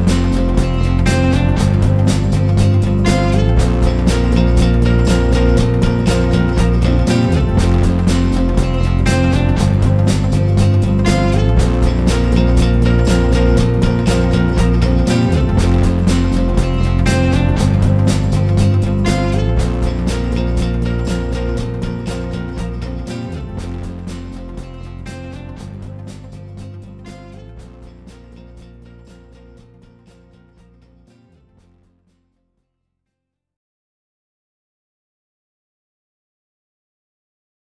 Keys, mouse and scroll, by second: 0.1 s, 2.8 Tab, 3.1 scroll down 1, 5.7 ctrl+3, 6.8 scroll down 1, 7.1 middle click, 8.2 scroll up 2, 8.5 middle click, 11.0 click, 11.5 click, 15.8 click, 25.1 click, 27.4 click, 29.5 shift+click, 30.1 ctrl+l, 31.4 click, 32.1 scroll up 2, 32.8 scroll down 1, 33.0 middle click.